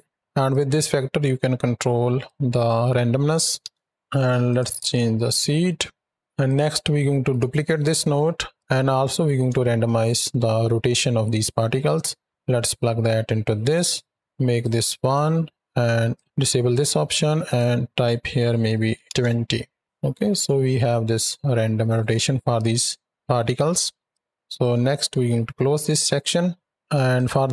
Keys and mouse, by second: 0.3-2.2 drag, 2.4-3.5 drag, 4.3 click, 4.5 click, 5.3-5.8 middle drag, 6.3 click, 7.0 shift+d, 8.4 click, 9.6 shift+middle drag, 11.7-13.6 drag, 14.4 click, 16.0 click, 16.2 click, 17.3-19.0 drag, 20.6 shift+click, 24.0 click, 25.7 click, 27.0 click.